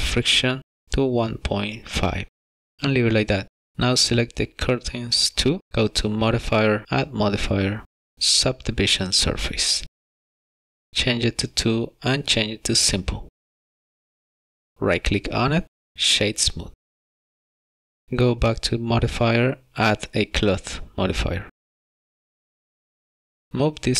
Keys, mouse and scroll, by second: 0.6 click, 3.5 click, 6.5 click, 7.4 click, 12.3 click, 13.9 click, 16.7 right click, 18.5 click, 23.7 click.